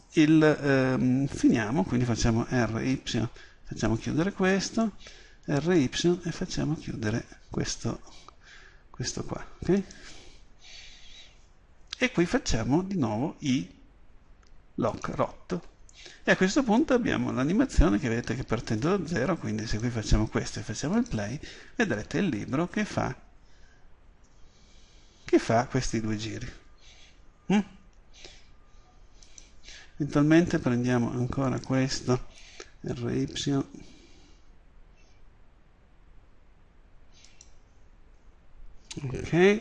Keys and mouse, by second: 1.5 right click, 2.7 r, 4.1-9.9 drag, 4.8 right click, 10.0-12.7 drag, 13.6 i, 16.9-31.2 drag, 31.6 right click, 32.7 r, 37.5-39.6 middle drag.